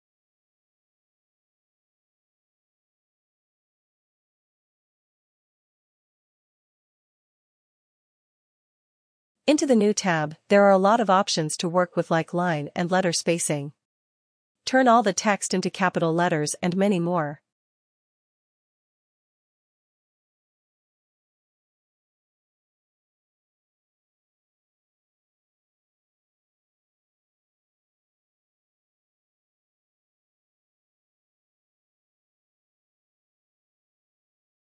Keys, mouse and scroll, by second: 2.7 click, 8.1 click, 10.2 click, 13.7 click, 14.4 click, 14.6 click, 14.8 click, 15.0 click, 19.0 click, 21.6 ctrl+z, 24.3 ctrl+z, 24.3 click, 25.8 ctrl+z, 32.3 click, 33.2 ctrl+z.